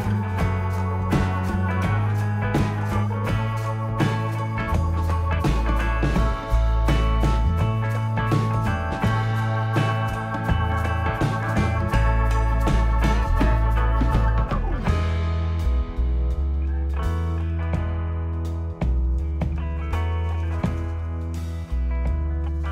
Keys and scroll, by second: 5.0 Right, 5.3 Delete, 7.4 space, 7.9 space, 12.3 ctrl+a, 22.4 ctrl+x.